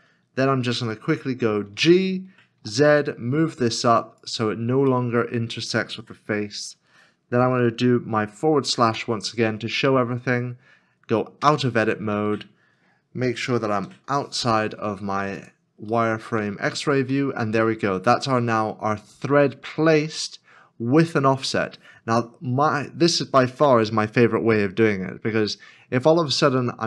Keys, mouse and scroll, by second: 0.3 scroll up 1, 1.6 g, 4.9 middle click, 8.9 /, 11.4 /, 11.4 Tab, 13.7 shift+z, 15.9 middle click, 16.6 scroll down 1, 17.3 scroll down 1, 17.5 middle click, 18.9 scroll up 1, 19.9 shift+middle click.